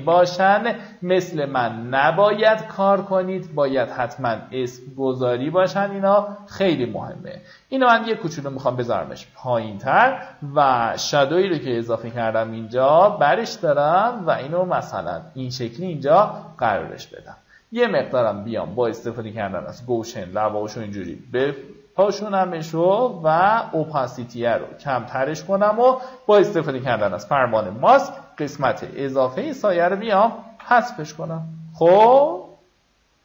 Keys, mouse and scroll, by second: 3.8 Escape, 5.2 click, 6.3 ctrl+click, 7.2-11.6 drag, 13.0 ctrl+shift+click, 21.8 KP_3, 24.4-25.9 drag, 27.4 b, 28.1 alt+right click, 28.9 click, 30.9 v.